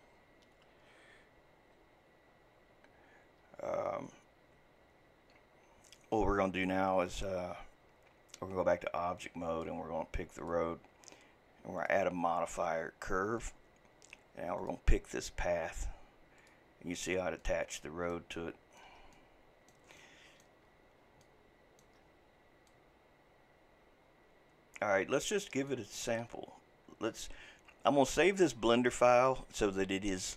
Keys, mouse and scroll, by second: 9.2-10.5 drag, 11.8-14.7 drag, 17.4-20.7 middle drag, 20.7-21.2 scroll up 4, 21.2-22.0 middle drag, 22.0-22.7 scroll down 2, 22.7-25.7 middle drag, 26.0 scroll down 2, 26.5-29.5 scroll up 1.